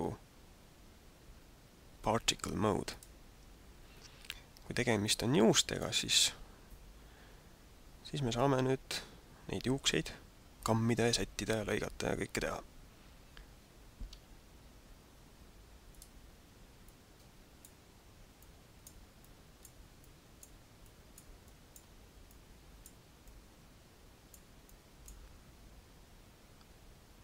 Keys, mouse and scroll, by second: 3.9 scroll down 1, 4.9 shift+middle click, 14.3 t, 15.9 click, 17.0 click, 18.3 click, 19.2 click, 19.9 click, 20.8 click, 21.4 click, 22.3 click, 23.3 click, 24.7 click.